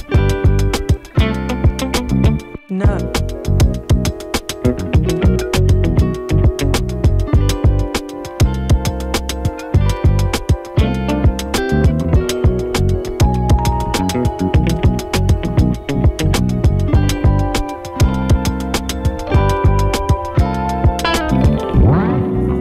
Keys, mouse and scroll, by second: 1.6-2.3 typing, 8.2 ctrl+i, 9.5 click, 18.5 ctrl+k, 20.4 click.